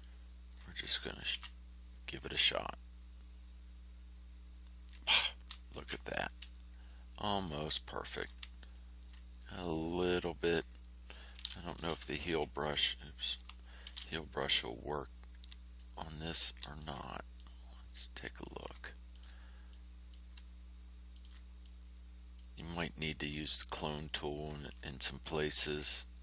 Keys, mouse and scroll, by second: 1.3 ctrl+f, 5.7 ctrl+shift+a, 8.6 ctrl+scroll up 2, 9.3 ctrl+middle click, 9.5 click, 11.7 h, 13.2 shift+click, 13.8 shift+h, 15.7-16.4 ctrl+shift+scroll down 4, 16.7 ctrl+shift+click, 17.3-18.6 ctrl+shift+drag, 19.1 ctrl+click, 19.6 ctrl+click, 21.1 ctrl+click, 21.6 ctrl+click, 25.0 ctrl+scroll down 2, 25.9-26.2 ctrl+scroll up 2.